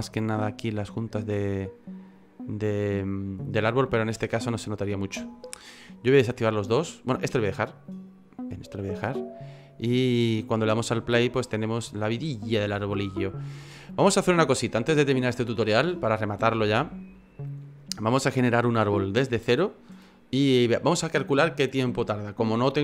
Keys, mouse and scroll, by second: 1.6 click, 2.2 click, 3.1 click, 3.6 click, 4.3 click, 5.8 click, 7.9 click, 8.5-9.1 scroll down 5, 9.0 middle click, 10.0 middle click, 11.4 click, 12.4 middle click, 13.6-13.9 scroll down 2, 14.1 middle click, 15.0 shift+middle click, 15.5 middle click, 18.4 middle click.